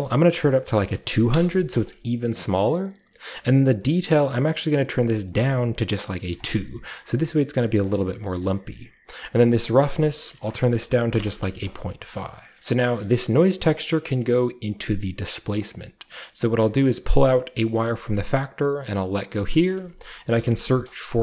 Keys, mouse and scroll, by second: 1.0 typing, 1.3 Return, 2.1 scroll down 1, 2.2 middle click, 5.0 click, 6.4 click, 6.4 typing, 7.4-8.2 scroll up 1, 8.2-9.3 scroll up 1, 9.3 click, 9.4 click, 11.1 typing, 11.2 Return, 12.0-12.8 scroll down 3, 12.5 middle click, 14.2 scroll down 1, 15.2 click, 15.8-17.7 scroll up 1, 17.7-19.4 drag, 20.3 typing.